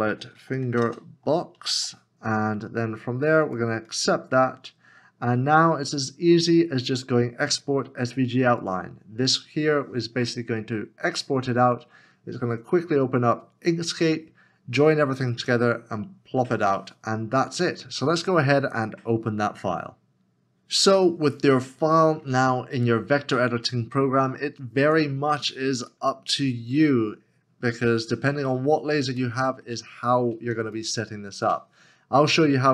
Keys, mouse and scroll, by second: 0.1-1.9 typing, 26.9-27.3 alt+scroll, 27.3 alt+scroll up 1, 29.3 middle click, 30.5 s, 30.9 space, 31.0 click.